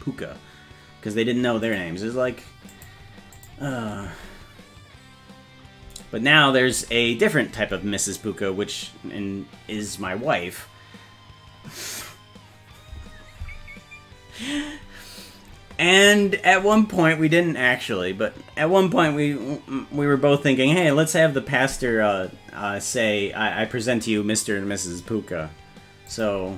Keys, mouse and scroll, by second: 1.7 click, 2.7 click, 3.4 click, 4.0 space, 5.9 space, 7.6 space, 26.1 click.